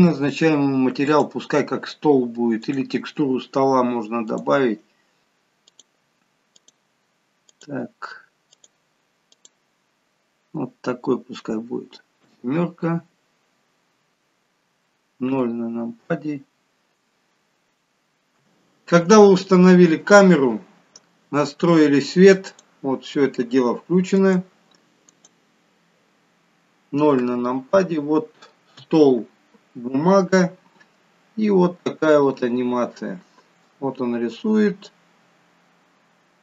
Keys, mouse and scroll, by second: 1.2 click, 2.7 click, 4.3 click, 12.4 KP_7, 13.7-14.5 scroll up 12, 15.4 KP_0, 17.6-18.4 scroll down 2, 22.5 click, 24.1 click, 25.1 click, 27.2 KP_0, 28.8 KP_0, 32.3 click.